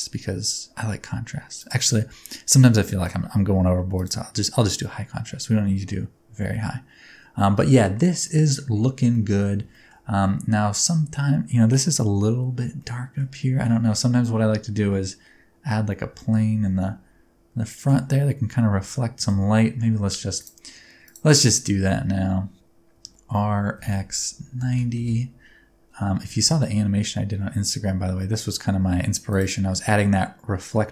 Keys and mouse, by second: 1.6-4.1 drag, 7.5 middle drag, 8.3-8.6 middle drag, 9.1 shift+middle click, 9.7 shift+middle drag, 10.2-10.8 middle drag, 12.8 middle click, 13.6 shift+a, 16.2 shift+middle click, 18.8 shift+middle click, 19.3 shift+a, 21.6 middle click, 22.9 r, 23.8 x, 24.7 KP_9, 24.7 KP_0, 25.0 KP_Enter, 26.2 Tab, 26.4 s, 29.3 click, 30.7 middle click.